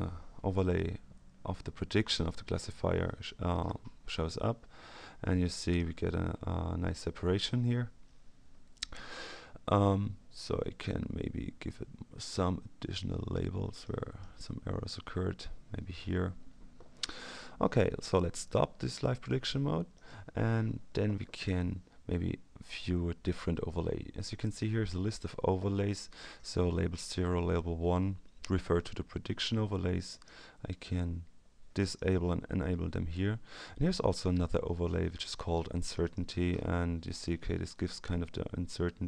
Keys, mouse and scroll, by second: 1.2-2.1 ctrl+scroll down 2, 2.3-2.7 ctrl+scroll down 2, 4.3-4.8 ctrl+scroll down 2, 5.9-6.7 ctrl+scroll down 2, 13.8-14.7 drag, 19.9 click, 30.1 click, 31.8 click, 36.0 click, 38.2-38.7 scroll up 2.